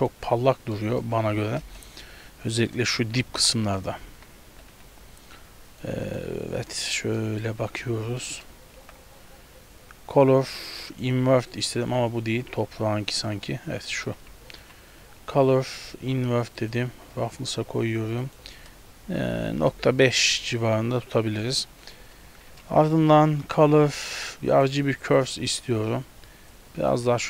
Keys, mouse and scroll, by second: 0.1 click, 0.8 middle click, 1.1 scroll up 1, 1.7 KP_0, 2.2-2.6 scroll down 2, 2.7 shift+middle click, 2.7-3.2 shift+scroll up 3, 3.3 ctrl+b, 4.1 z, 4.6 a, 4.8 a, 5.7 click, 6.1 click, 7.2 middle click, 7.7-8.7 scroll down 7, 8.3 middle click, 8.8 shift+a, 12.0 x, 13.2 right click, 13.9 middle click, 14.3-14.6 scroll down 3, 14.6 shift+a, 18.3 click, 20.4 scroll up 4, 21.5 middle click, 22.0 scroll down 4, 22.6 shift+a, 26.6 click.